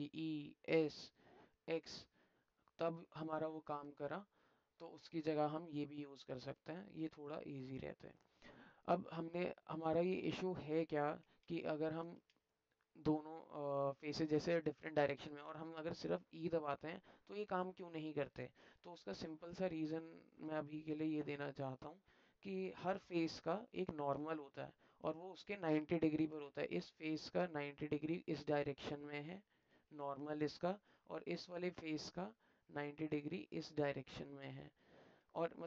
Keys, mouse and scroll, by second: 7.3 alt+click, 9.4-10.7 middle drag, 12.4-14.3 middle drag, 14.9 alt+middle click, 18.3 ctrl+z, 19.2 alt+middle click, 20.0 alt+middle click, 21.6 click, 25.2-26.2 alt+middle drag, 26.9-28.0 drag, 28.9 click, 30.2 alt+click, 31.5 alt+click, 32.3 middle click, 33.4-34.8 drag, 35.2 middle click, 35.3 alt+click.